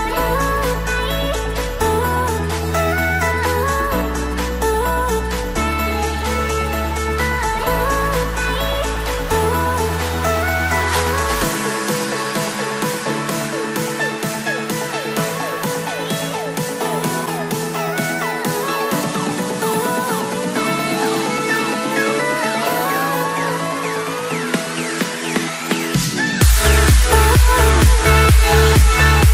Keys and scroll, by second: 7.5 ctrl+g.